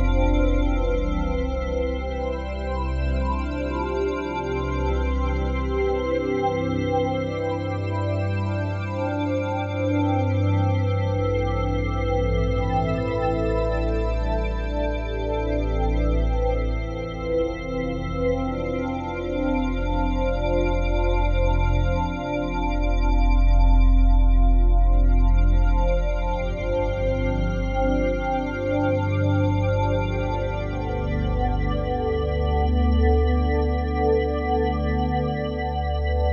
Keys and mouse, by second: 0.9 F3, 2.2-2.9 typing, 4.4-5.9 drag, 5.9 Tab, 6.7 click, 7.1 click, 7.6 click, 8.1 alt+click, 8.5 shift+click, 11.9 click, 12.4 click, 13.2-14.6 drag, 14.6 ctrl+p, 15.7 Down, 16.5 Return, 17.3-18.4 alt+drag, 18.5 click, 19.2 click, 19.6 shift+click, 20.6 click, 21.1 click, 21.6-23.0 alt+drag, 23.0 ctrl+p, 24.0 Return, 25.4-26.8 drag, 26.8 g, 28.1 Escape, 28.6 click, 29.6 r, 30.8 Escape, 31.4 alt+click, 31.8-33.0 alt+drag, 33.0 r, 33.3 x, 33.5 x, 35.0 Escape, 35.7-36.3 shift+drag.